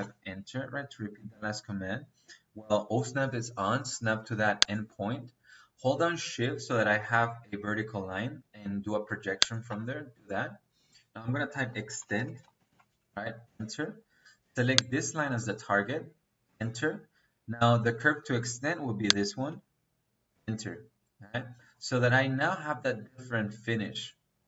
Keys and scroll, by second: 11.3 Escape, 11.9-13.3 typing, 16.3 space, 20.2 space.